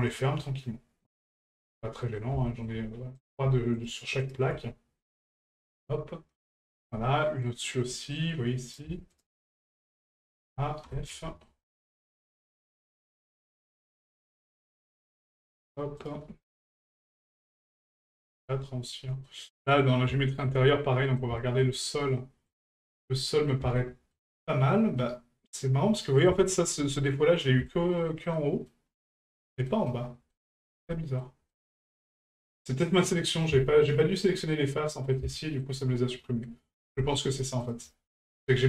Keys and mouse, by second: 0.1 shift+right click, 1.5 shift+middle drag, 2.0 middle click, 2.5 middle click, 3.2 right click, 3.7 right click, 4.2 shift+right click, 5.8-6.4 middle drag, 6.9-7.4 middle drag, 8.6 right click, 9.1 shift+right click, 9.6 shift+right click, 10.2 shift+right click, 11.2 shift+middle drag, 12.0 right click, 12.6 shift+right click, 13.6 shift+right click, 14.0 shift+right click, 15.0 right click, 15.6 shift+right click, 16.0 shift+right click, 17.5 shift+right click, 18.9-19.3 middle drag, 19.9 middle click, 20.2 shift+middle drag, 21.0 middle click, 21.4 shift+middle drag, 22.2-22.5 middle drag, 22.7 shift+middle drag, 23.2-23.5 middle drag, 23.8-24.1 shift+middle drag, 25.0-26.2 middle drag, 26.4-26.8 shift+middle drag, 27.1-27.4 middle drag, 27.7-28.1 shift+middle drag, 28.3-28.7 shift+middle drag, 29.3-29.7 shift+middle drag, 29.9-30.3 shift+middle drag, 30.4 middle drag, 30.9 shift+middle drag, 31.5 middle click, 32.5 right click, 33.9-34.2 shift+middle drag, 34.7-35.1 middle drag, 35.4 shift+middle click, 36.1-36.5 middle drag, 37.0 shift+middle drag, 37.6 right click, 38.1 shift+right click.